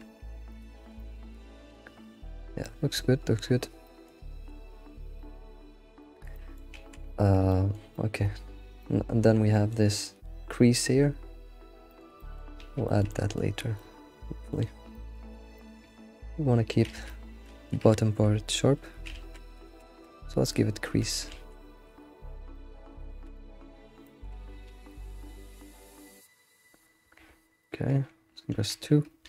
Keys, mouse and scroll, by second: 0.7 alt+shift+z, 0.9-3.5 middle drag, 3.5-3.8 scroll down 3, 3.8 middle click, 4.3 alt+shift+z, 4.9 alt+shift+z, 6.0-11.6 shift+middle drag, 7.2 scroll down 1, 12.2 middle click, 12.6 alt+shift+z, 12.8 shift+middle click, 13.6 scroll down 1, 13.7-16.9 middle drag, 16.9 alt+shift+z, 17.1 middle click, 17.5 alt+shift+z, 18.2-18.6 scroll up 1, 19.1 alt+shift+z, 19.6 alt+shift+z, 20.1 Tab, 20.6 click, 20.9 alt+q, 21.3 alt+shift+z, 21.9 alt+q, 22.5 middle click, 23.1 alt+q, 23.3-23.7 middle drag, 23.7-24.0 scroll up 1, 24.0-24.7 shift+middle drag, 24.7 alt+shift+z, 25.1 alt+shift+z, 25.8 Tab, 26.0-26.7 middle drag, 26.7 Tab, 27.2 Tab, 27.7 alt+click, 28.6 2.